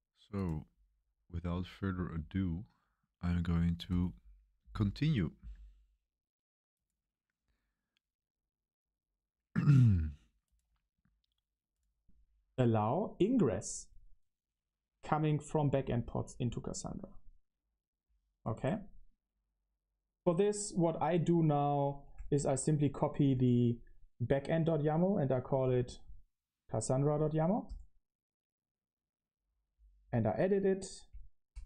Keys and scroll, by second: 1.3 super+1, 1.5 super+1.